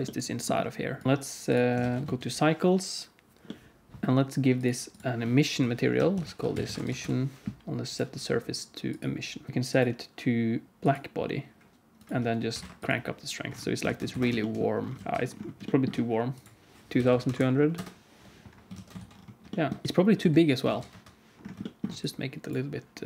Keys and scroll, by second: 1.0 alt+a, 1.0 ctrl+s, 1.8 ctrl+s, 1.9 z, 6.5 s, 13.8 alt+a, 14.1 ctrl+s, 15.0 alt+shift+z, 17.0 2, 17.3 0, 18.6 alt+a, 18.9 ctrl+s, 20.1 Tab, 20.6 alt+z, 20.8 KP_1.